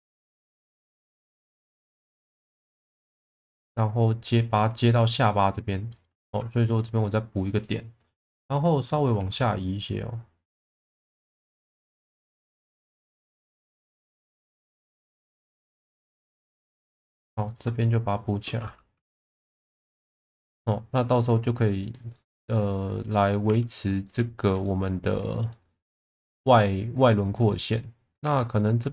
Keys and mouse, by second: 1.3 shift+middle click, 1.7 middle click, 3.0 shift+middle click, 3.5 2, 5.5 right click, 6.2 1, 6.7 click, 7.1 middle click, 9.1 shift+v, 10.6 click, 11.4 click, 11.8 shift+middle click, 12.6 middle click, 13.4 click, 14.7 ctrl+z, 15.5 shift+v, 16.7 click, 17.1 2, 17.4 click, 18.2 shift+click, 19.5 f, 19.9 middle click, 22.1 middle click, 23.4 1, 23.7 click, 24.0 alt+middle click, 24.6 middle click, 27.5 shift+middle drag, 28.2 2, 28.5 click.